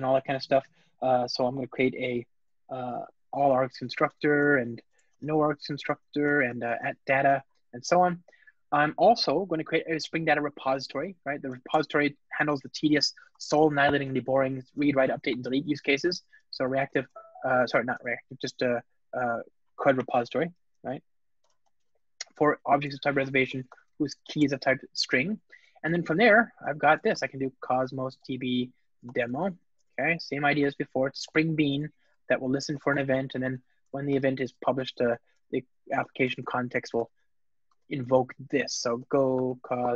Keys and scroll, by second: 7.9 alt+super+l, 11.5 Return, 17.9 alt+BackSpace, 21.3 Return, 24.4 alt+super+l, 26.0 Return, 31.2 Return.